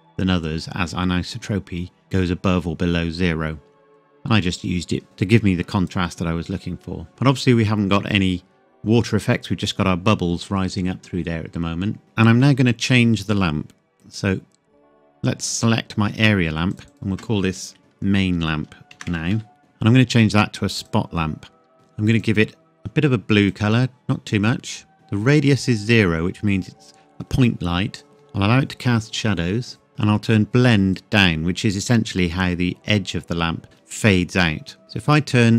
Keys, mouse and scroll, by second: 0.4 click, 7.2-9.2 scroll down 1, 15.4 click, 17.8 typing, 18.9-19.3 typing, 19.6 click, 21.0 click, 22.1 click, 30.9 click.